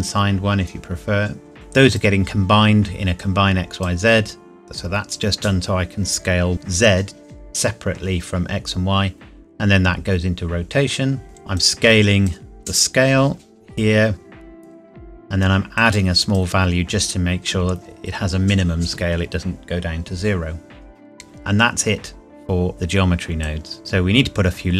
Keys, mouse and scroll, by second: 1.5 click, 11.5 click, 15.7 click, 23.4 click.